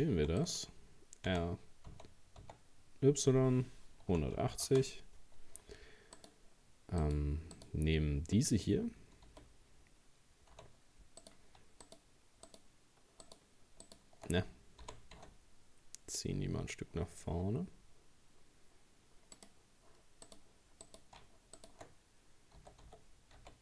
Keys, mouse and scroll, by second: 0.0 shift+d, 1.3 r, 6.2 right click, 7.0 right click, 7.5 right click, 9.3 g, 11.8 shift+right click, 12.5 shift+right click, 13.3 shift+right click, 13.9 shift+right click, 14.8 g, 20.3 right click, 20.9 right click, 21.6 shift+right click, 22.6 s.